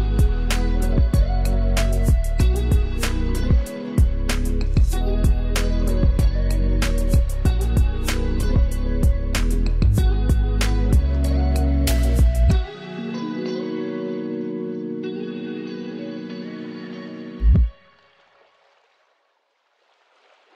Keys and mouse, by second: 2.6 ctrl+shift+], 5.0 click.